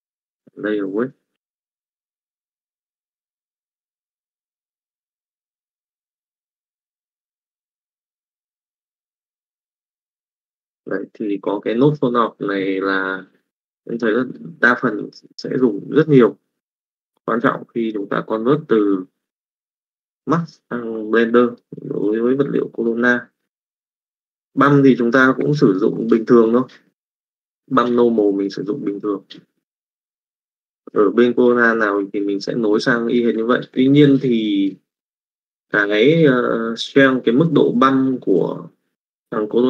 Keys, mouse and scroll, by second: 0.8 click, 1.9 click, 2.8 middle click, 3.4-4.4 drag, 5.0-6.0 middle drag, 6.5-9.0 drag, 9.6 middle click, 11.2 click, 13.4 middle click, 14.2 middle click, 15.1 click, 15.9 click, 16.6 click, 17.4 click, 18.0 click, 21.4 middle click, 22.2 middle click, 23.3 middle click, 24.3 middle click, 28.4 middle click, 29.1 click, 31.9 middle click.